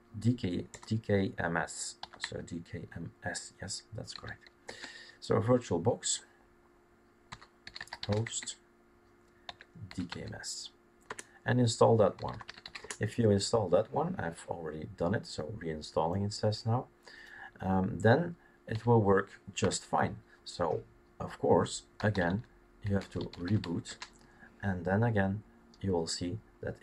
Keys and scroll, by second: 0.7-2.7 typing, 4.1 typing, 4.6 Tab, 7.4-9.9 typing, 10.0 Tab, 11.1 Return, 11.9-13.1 typing, 18.7 typing, 19.6 Return, 21.7-24.5 typing.